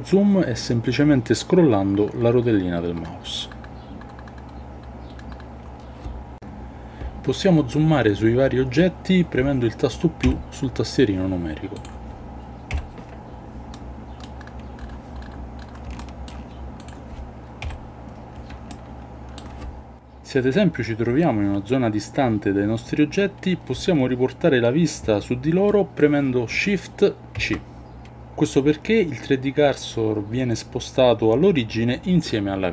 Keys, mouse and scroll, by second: 10.2 KP_Decimal, 12.7 KP_Decimal, 13.7-14.2 middle drag, 15.9-16.3 shift+middle drag, 16.8 click, 17.6 KP_Decimal, 18.7-19.4 shift+middle drag, 27.3 shift+c.